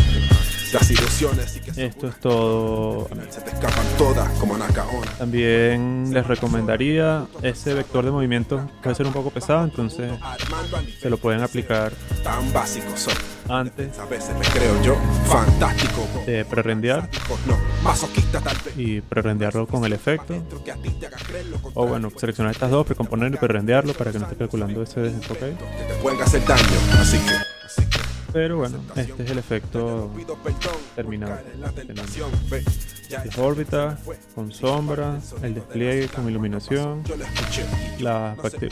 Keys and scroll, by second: 1.6 space, 2.7 space, 5.5 z, 6.4 v.